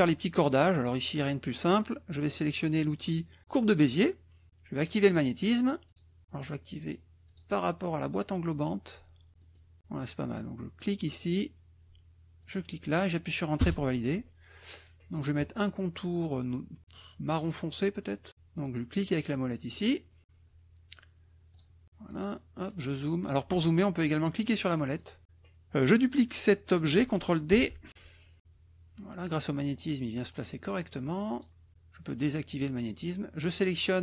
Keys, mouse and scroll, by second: 5.0 click, 5.8 click, 7.2 click, 9.3 middle click, 10.7 click, 12.4 click, 13.6 Return, 19.8 middle click, 21.5 click, 22.1 middle click, 22.6 middle click, 24.6 middle click, 25.0 middle click, 27.5 ctrl+d, 27.8-31.6 ctrl+drag, 32.5 click.